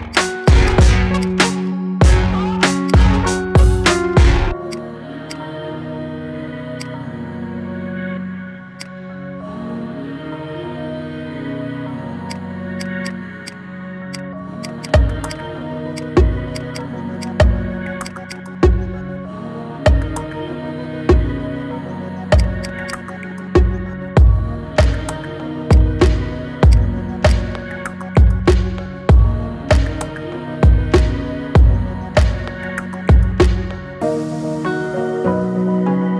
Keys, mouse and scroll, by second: 0.2 alt+shift+click, 0.4 alt+shift+click, 1.0 alt+shift+click, 2.6 alt+shift+click, 3.0 middle click, 3.5-4.4 scroll up 3, 4.4 alt+shift+click, 5.0 alt+shift+click, 5.4 scroll down 3, 5.7 middle click, 6.5 alt+shift+click, 7.3 ctrl+b, 8.9 scroll down 3, 9.0-10.4 middle drag, 10.4 KP_1, 11.3 Tab, 11.8-12.2 shift+middle drag, 12.2 click, 12.5 click, 12.9-13.9 right drag, 13.9 click, 14.4 click, 14.5-15.8 right drag, 16.3 click, 16.5-17.9 right drag, 18.2 click, 18.4-18.9 scroll up 2, 18.9-20.4 middle drag, 20.4 scroll down 2, 20.7-22.2 middle drag, 22.2 click, 22.4 shift+click, 22.7 shift+drag, 23.4 KP_3, 23.8-24.4 scroll up 3, 24.4 g, 25.6-26.0 scroll down 4, 26.0-26.3 middle drag, 26.3 scroll up 1, 26.4 click, 26.8 scroll down 3, 27.0 click, 27.5-29.0 middle drag, 29.0-30.2 scroll up 2, 30.2-32.7 shift+middle drag, 32.7-33.0 scroll up 2, 33.0-33.7 middle drag, 33.7 scroll down 2, 34.0-35.2 middle drag, 35.2 KP_1, 36.0 shift+a.